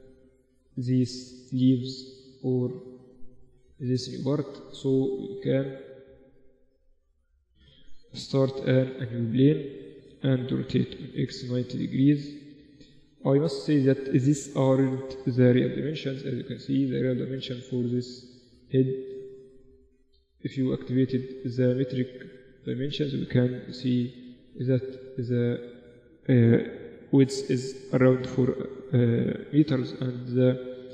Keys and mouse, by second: 0.1-3.1 middle drag, 3.2-7.8 middle drag, 7.8 shift+a, 10.3 r, 12.4-14.4 drag, 14.0-17.0 middle drag, 17.0-18.2 drag, 18.2 middle click, 18.8 click, 19.6 middle click, 19.8-26.9 drag, 23.6 n.